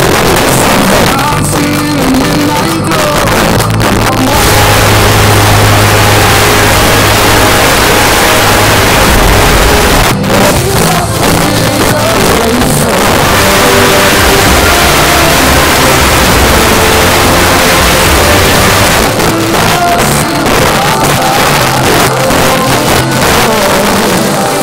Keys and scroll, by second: 0.3 Return, 10.0 Page_Down, 18.9 Page_Down.